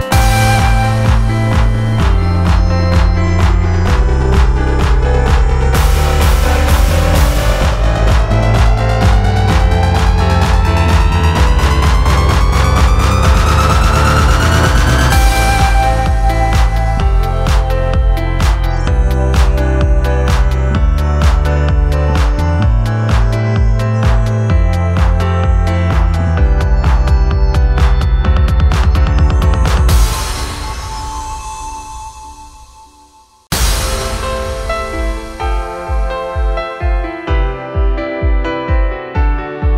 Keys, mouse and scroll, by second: 0.1 ctrl+t, 9.2 ctrl+a, 11.0 ctrl+d, 17.3-20.0 ctrl+drag, 26.5 ctrl+alt+f, 28.0 ctrl+alt+f, 29.4 ctrl+alt+f, 31.1 ctrl+alt+f, 32.6 ctrl+alt+f, 34.5 ctrl+alt+f, 36.4 ctrl+alt+f, 38.6 ctrl+t.